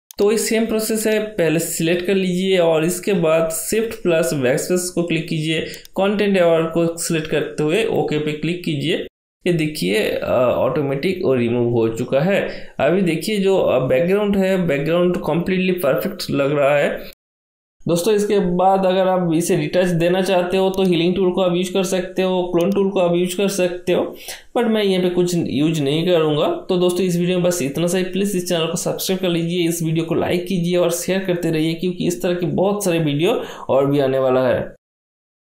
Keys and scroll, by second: 3.8 shift+BackSpace, 13.2 ctrl+d.